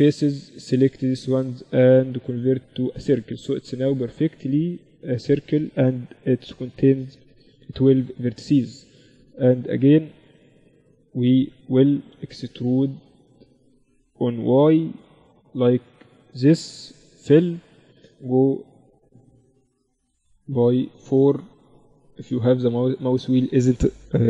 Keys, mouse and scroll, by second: 0.2 w, 2.8 z, 3.6 z, 4.0 z, 4.5 z, 10.8 KP_7, 12.1-14.6 middle drag, 13.7 e, 16.4 f, 18.9-22.2 typing.